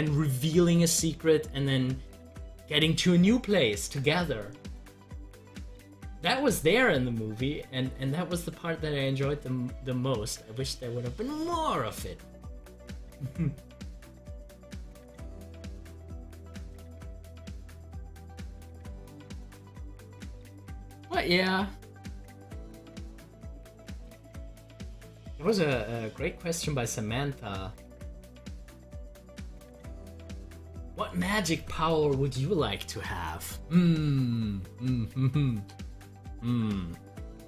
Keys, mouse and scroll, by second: 17.6 scroll down 1, 18.5-22.1 middle drag, 22.1-32.7 drag.